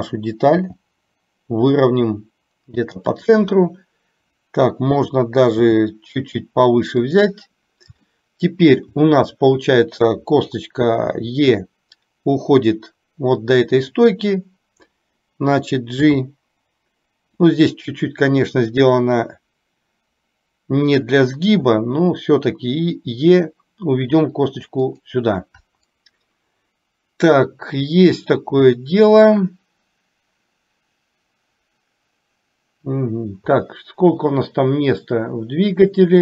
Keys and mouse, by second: 0.7 g, 5.7 g, 8.2 shift+middle click, 11.2 e, 16.2 g, 21.8 e, 33.8-36.2 middle drag.